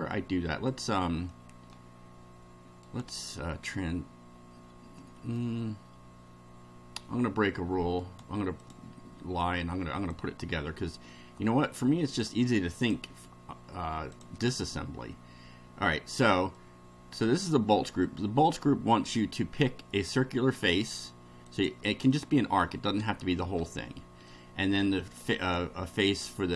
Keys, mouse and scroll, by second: 0.7 click, 1.3-1.9 middle drag, 2.8 right click, 4.9-5.5 middle drag, 8.0 right click, 8.6 click, 10.1-12.3 drag, 12.8 click, 14.1 click, 14.7-16.4 middle drag, 16.5 middle click, 21.5 click, 22.1 middle click, 23.6 shift+middle click, 25.0 ctrl+click.